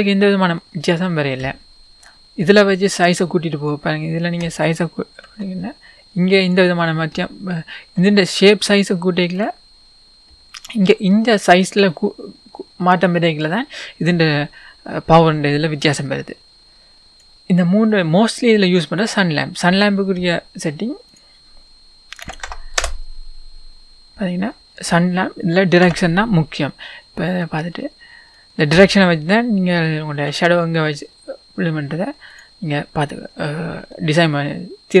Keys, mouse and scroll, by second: 0.7-2.1 middle drag, 2.1-6.5 drag, 7.8 s, 9.4 click, 11.9-17.3 drag, 17.3-19.0 scroll down 2, 19.0 scroll down 1, 19.0 click, 19.9-20.3 scroll down 1, 22.8-27.7 drag, 24.4-25.1 scroll up 1, 25.9 KP_1, 30.2 r, 32.4 click, 33.9-35.0 middle drag.